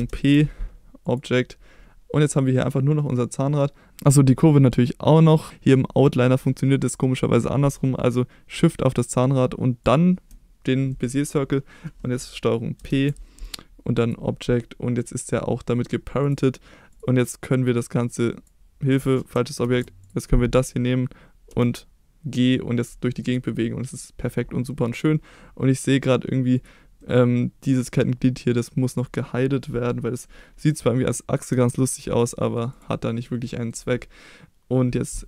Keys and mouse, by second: 0.0 ctrl+p, 9.0 shift+click, 9.8 shift+click, 10.9 middle click, 12.8 ctrl+p, 16.2 click, 16.9 click, 17.5-18.4 drag, 19.6 ctrl+z, 20.0 click, 21.5 g, 23.2 right click, 24.7-25.0 middle drag, 26.5 click, 27.0-27.6 middle drag, 31.5 h, 32.2-32.5 middle drag, 32.9-33.2 middle drag, 33.4-34.6 middle drag.